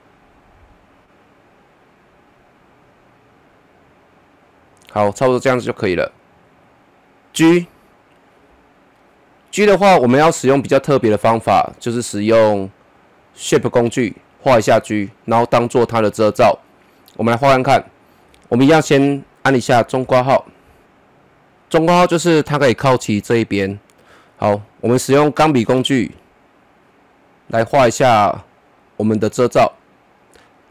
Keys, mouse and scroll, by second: 0.3-6.7 drag, 7.0 click, 8.9-12.1 middle drag, 20.0 [, 25.4 click, 26.9 click.